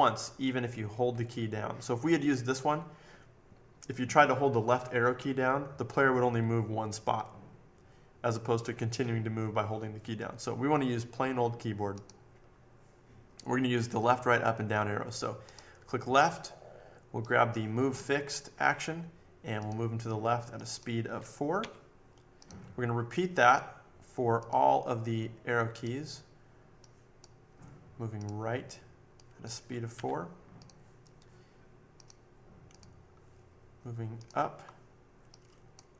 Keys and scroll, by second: 21.6 4, 29.9 4.